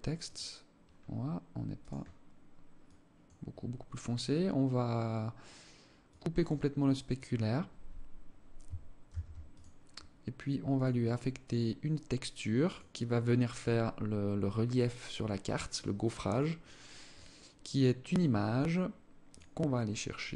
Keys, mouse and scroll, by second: 1.1 click, 5.4 click, 8.4 ctrl+s, 10.2 click, 12.0 click, 15.6 click, 18.6 click.